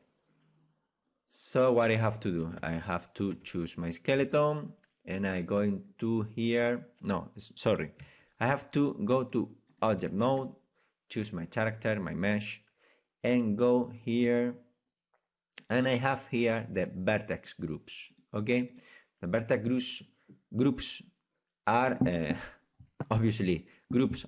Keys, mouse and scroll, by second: 2.6 Tab, 2.8-8.0 right drag, 3.3 Tab, 4.2 Tab, 8.0 Tab, 8.1 Tab, 9.8 click, 10.1-15.1 drag, 10.4-15.1 right drag, 15.6-24.2 drag.